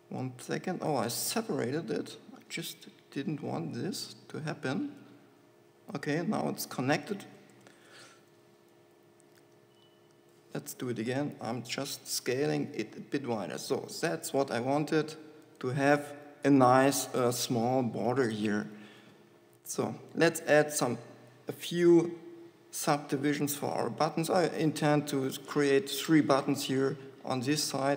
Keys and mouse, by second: 0.1 g, 2.0 ctrl+z, 3.4 ctrl+z, 5.3 g, 7.3 click, 7.9 KP_7, 8.7 b, 11.4 s, 15.9-17.3 drag, 20.9 ctrl+r.